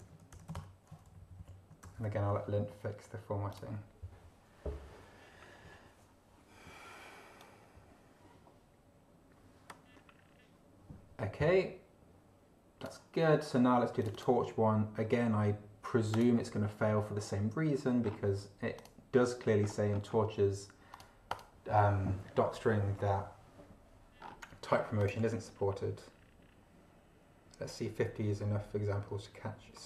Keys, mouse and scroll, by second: 0.0-0.9 typing, 1.1 ctrl+shift+Left, 1.8 ctrl+BackSpace, 2.0 ctrl+Return, 3.5 click, 7.4-13.0 drag, 13.2 scroll down 2, 14.0 click, 15.0-15.3 scroll down 2, 16.1 click, 18.0 scroll down 2, 18.8 click, 19.6 scroll down 2, 20.9 click, 21.3 click, 24.2-24.9 scroll down 2, 25.0 click.